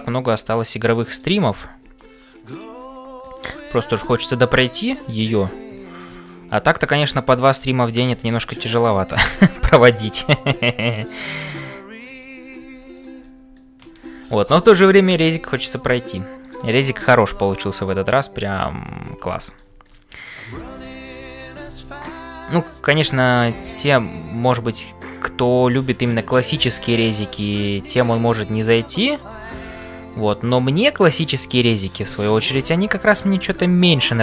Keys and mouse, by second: 0.0-34.2 typing, 0.3 middle click, 3.2 middle click, 5.7 middle click, 6.2 middle click, 8.9 middle click, 11.4 middle click, 13.5 middle click, 14.5 shift+middle click, 15.2 middle click, 16.4 click, 19.9 middle click, 20.9 shift+click, 21.3-24.2 middle drag, 24.8-27.5 middle drag, 29.4 middle click, 29.9-31.0 middle drag, 31.9 middle click.